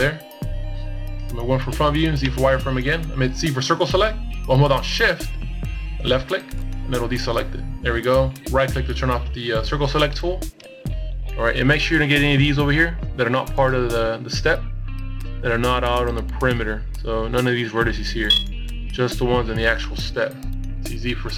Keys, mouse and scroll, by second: 6.3 right click, 15.8 middle click, 16.8 z, 17.6 middle click.